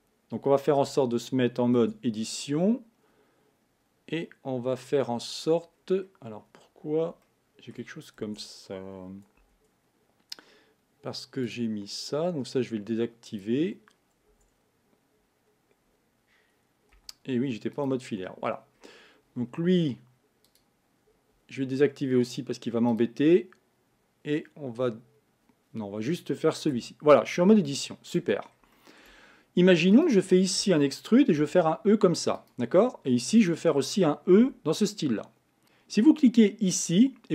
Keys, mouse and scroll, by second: 0.7 Tab, 1.8 Tab, 3.1 scroll down 3, 4.0-5.0 scroll down 2, 5.0 middle click, 5.7-7.2 scroll down 1, 7.2 shift+middle click, 8.2 Tab, 9.4 Tab, 11.4 click, 13.3-14.3 drag, 14.3 Tab, 16.9 z, 18.3 scroll up 3, 20.4 click, 22.9 click, 26.8 Tab, 27.6 shift+middle click, 28.3 scroll up 2, 28.7-29.9 shift+middle drag, 29.9 click, 31.4 e, 33.4 click, 34.4 e, 35.6 click.